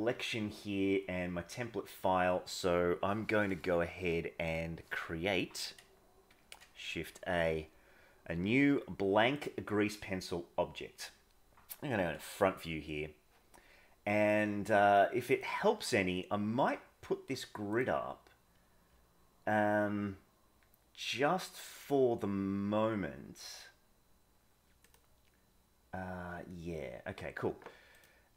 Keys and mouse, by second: 6.2 shift+a, 12.0 KP_1, 14.2-16.0 drag, 17.6-26.4 drag, 27.9 click.